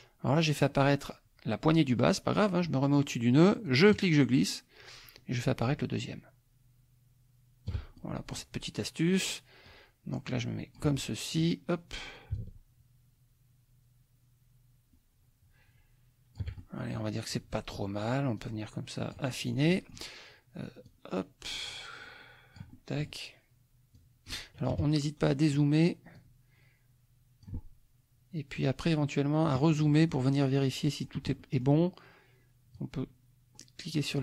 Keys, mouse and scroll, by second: 3.6-7.8 shift+drag, 8.0 shift+middle click, 9.6-10.9 drag, 11.0 click, 12.3-16.6 shift+drag, 18.4-20.1 drag, 20.9-23.2 drag, 22.7 right click, 23.9 click, 24.7 KP_Subtract, 25.3-25.7 scroll up 1, 26.2-27.6 drag, 28.5-29.6 drag, 29.7 click, 30.8 click, 31.4 click, 32.7-34.2 drag.